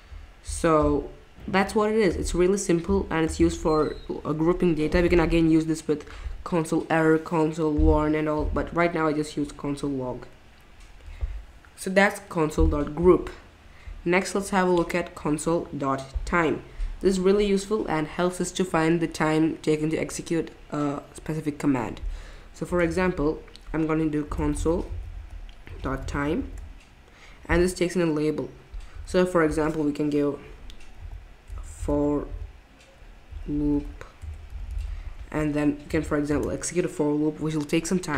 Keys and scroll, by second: 8.4 typing, 22.6 Return, 22.8 Return, 24.0-26.9 typing, 30.7-35.2 typing, 35.9 Down, 36.3 Return.